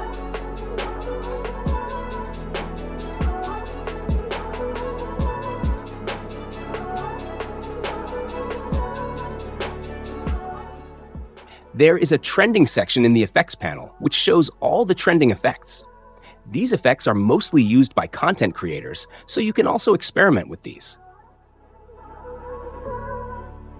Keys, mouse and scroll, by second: 1.8 click, 7.2-8.2 drag, 8.6 click, 22.6-23.6 drag.